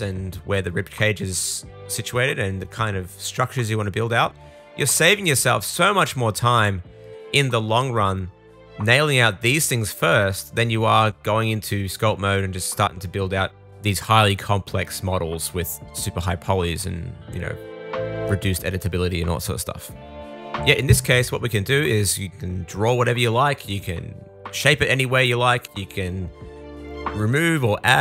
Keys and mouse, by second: 0.1 super+z, 0.9 super+z, 1.7 super+z, 1.8 super+z, 2.8 super+z, 2.9 super+z, 3.0 super+z, 3.3 super+z, 3.7 super+z, 3.9 super+z, 5.3 super+z, 5.5 super+z, 6.6 super+s, 7.6 alt+middle click, 8.6 click, 8.9 super+click, 9.3-10.6 super+middle drag, 10.7 middle click, 11.1 click, 11.3 middle click, 11.8 super+z, 12.1 super+z, 12.2 super+z, 12.4 super+z, 12.6 super+z, 15.1 click, 15.5 super+z, 16.4 click, 19.8 super+z, 20.4-23.4 shift+super+middle drag, 21.2 super+z, 21.6 super+z, 23.4-28.0 drag.